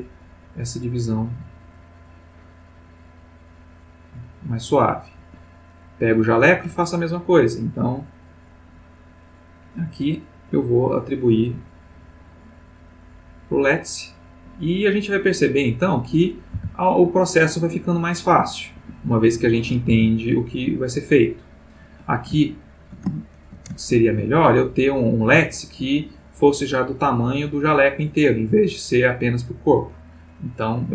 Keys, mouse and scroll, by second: 5.2 Escape, 5.7 click, 9.5 click, 10.2 click, 11.6 click, 13.6 click, 14.8 click, 15.9 click, 16.6 r, 18.8 Escape, 19.4 click, 20.0 r, 21.8 Escape, 22.5-23.1 ctrl+middle drag, 23.2 ctrl+shift+middle click, 23.8-24.3 ctrl+shift+middle drag, 24.6 ctrl+click, 30.5 click.